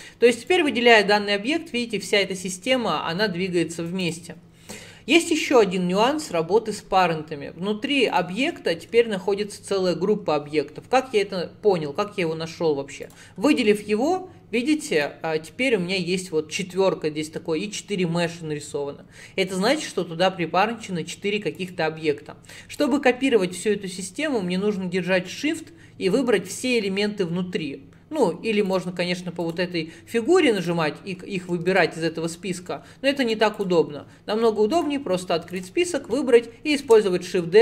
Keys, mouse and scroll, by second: 0.5 click, 5.1 scroll down 1, 5.9 scroll down 3, 8.1 click, 13.1 click, 13.5 click, 15.0 click, 21.6 click, 22.8 shift+click, 28.7 click, 29.5 click, 33.3 click, 33.6 click, 34.8 click, 35.6 shift+click, 37.0 shift+d.